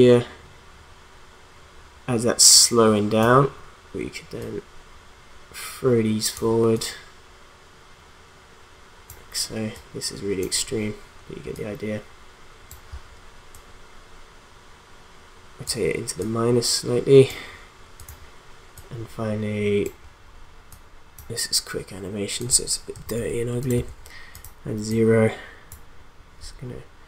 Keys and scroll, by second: 22.9 0.